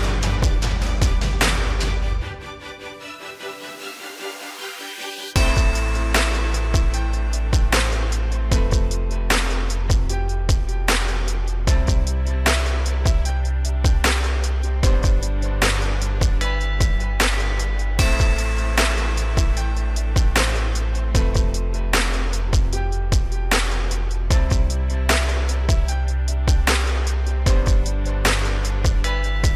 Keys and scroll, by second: 14.0 ctrl+0, 15.0 Tab, 16.6 ctrl+0.